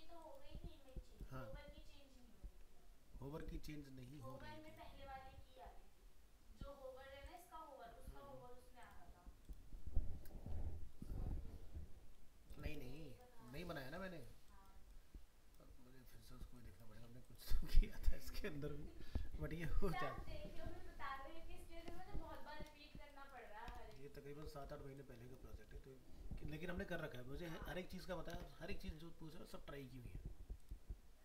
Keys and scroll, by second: 23.9 ctrl+-.